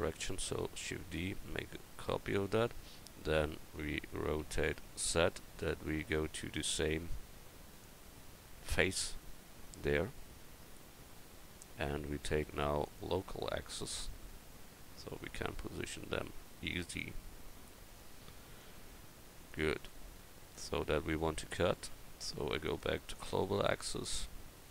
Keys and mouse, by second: 0.9 shift+d, 4.4 r, 10.4 middle click, 10.8 middle click, 12.8-17.0 drag, 17.3-18.7 middle drag, 20.1-20.4 drag, 20.4-20.8 middle drag, 22.6-24.7 drag.